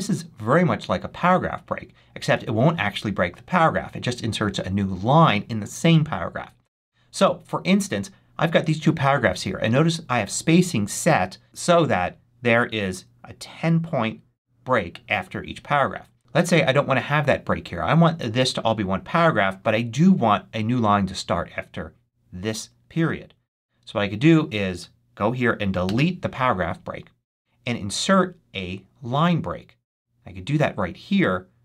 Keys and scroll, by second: 25.7 BackSpace.